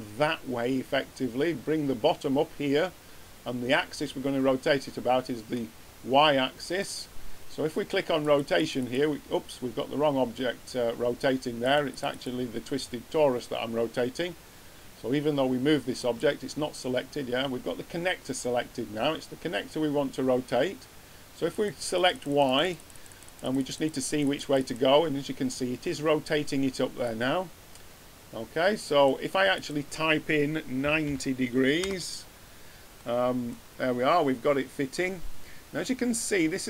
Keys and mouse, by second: 5.5 middle click, 8.2-10.7 drag, 11.5-14.0 drag, 15.9-17.7 drag, 21.4-26.4 drag, 27.0-28.9 drag, 29.5-31.5 drag, 33.6-34.5 middle drag.